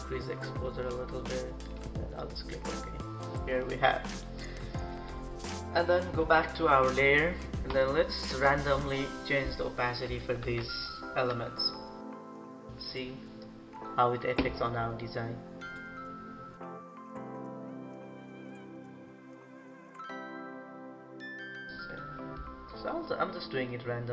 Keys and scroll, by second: 10.4 ctrl+=.